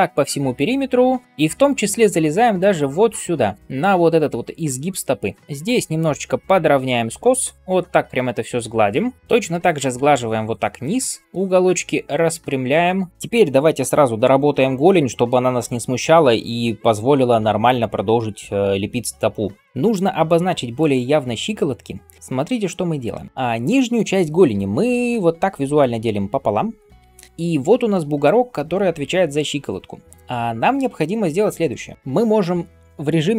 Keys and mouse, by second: 24.4 d, 24.9 d, 25.0 d, 25.0 d, 26.7 d, 26.8 d, 26.9 d.